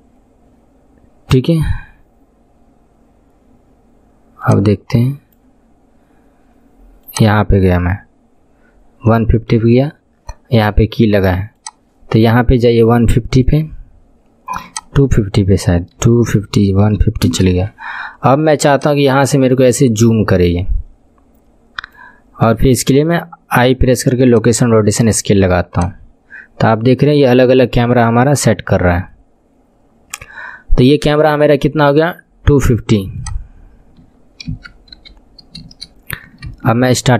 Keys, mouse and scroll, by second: 7.2-10.9 drag, 11.7-21.8 drag, 23.7 i, 25.8-30.4 drag, 33.3-36.3 drag, 36.6 space.